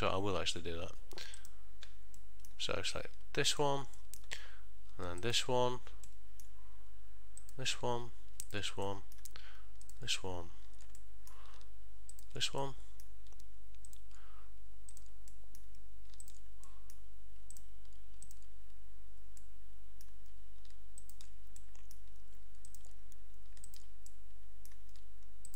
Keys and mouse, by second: 1.5 click, 2.3 middle click, 3.6 click, 4.1 middle click, 5.5 ctrl+shift+click, 6.2 middle click, 7.5 shift+click, 8.6 ctrl+shift+click, 9.0 middle click, 10.0 shift+click, 11.1 middle click, 12.2 ctrl+shift+click, 12.7 middle click, 14.0 shift+click, 15.0 shift+click, 15.4 middle click, 16.4 ctrl+shift+click, 16.8 middle click, 17.7 shift+click, 18.4 shift+click, 19.5 middle click, 21.1 ctrl+shift+click, 21.7 middle click, 22.8 shift+click, 23.8 ctrl+shift+click, 24.2 middle click.